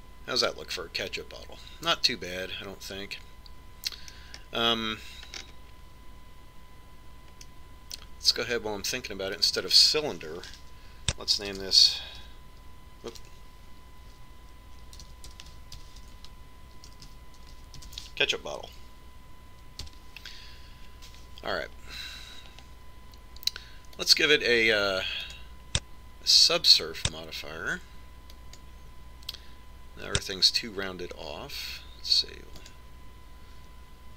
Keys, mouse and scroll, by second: 0.4 Tab, 5.8-8.9 middle drag, 9.1-10.9 middle drag, 11.0 click, 19.2 t, 25.6-28.8 drag.